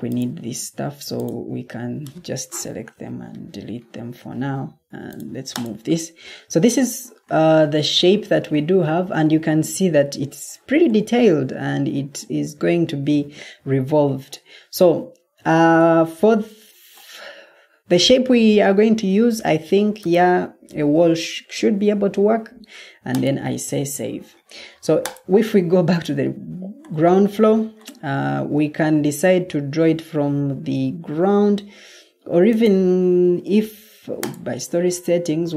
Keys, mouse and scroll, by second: 2.5 Delete, 28.4 Escape.